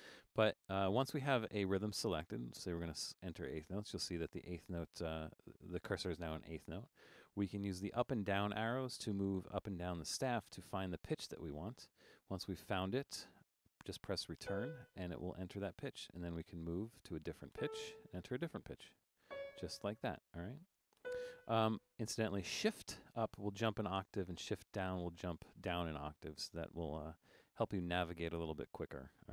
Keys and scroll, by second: 2.5 4, 8.0 Up, 8.2 Up, 8.4 Up, 8.6 Up, 8.8 Down, 9.0 Down, 9.3 Down, 9.4 Down, 9.6 Down, 10.1 Down, 10.3 Up, 10.4 Up, 10.6 Up, 10.8 Up, 10.9 Up, 11.7 Up, 11.9 Down, 12.1 Down, 12.6 Down, 14.5 Return, 16.5 Down, 17.5 Return, 18.8 Up, 19.0 Up, 19.3 Return, 20.0 Down, 21.0 Return, 23.0 shift+Up, 25.1 shift+Down, 26.3 shift+Up, 26.9 Up, 27.1 Up, 27.4 Up, 27.5 Up, 27.8 shift+Down, 28.5 Down.